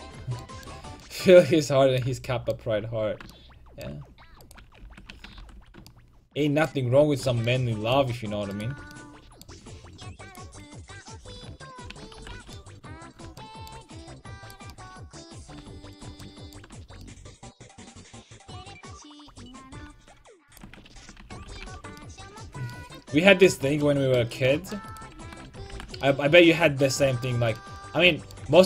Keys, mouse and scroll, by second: 4.5 right click, 4.9 ctrl+x, 5.1 right click, 5.1 a, 5.5 ctrl+t, 5.6 a, 5.9 click, 8.6 right click, 11.7 ctrl+x, 11.9 a, 12.2 ctrl+t, 12.4 a, 14.5-18.0 right drag, 18.0-20.5 middle drag, 20.5 right click, 21.0 ctrl+x, 21.2 a, 21.5 ctrl+t, 21.7 a, 22.5-23.7 middle drag, 24.9-26.4 right drag, 25.2 ctrl+x, 25.5 a, 25.8 ctrl+t, 25.9 a, 26.4 click.